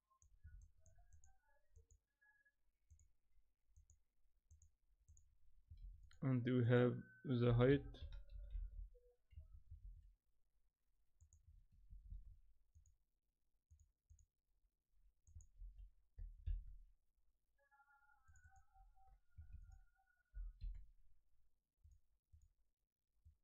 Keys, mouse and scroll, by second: 0.6 shift+middle click, 1.1 click, 1.7 click, 5.8 shift+a, 9.8 shift+a, 11.2 click, 11.9 shift+d, 13.7 click, 14.1 click, 18.4 click, 19.5 shift+a, 23.2 click.